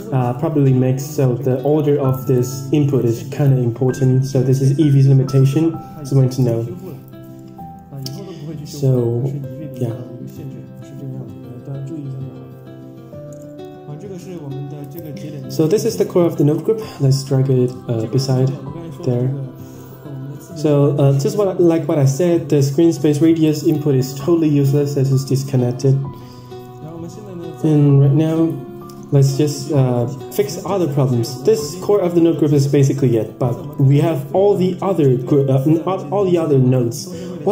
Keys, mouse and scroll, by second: 1.0-2.4 drag, 3.0 click, 6.4 middle drag, 7.0 scroll down 5, 7.3 middle click, 9.3 click, 11.0-12.0 scroll up 3, 13.4 middle drag, 13.8-14.8 scroll down 7, 14.1 middle drag, 14.8-15.4 drag, 15.9 click, 16.4 click, 17.1-18.2 scroll up 8, 17.4 middle drag, 18.2 middle click, 21.6 click, 22.8-23.1 middle drag, 22.8-24.4 scroll down 9, 23.9 middle click, 24.4 middle click, 26.8-27.1 middle drag, 27.4 middle click, 30.8 click.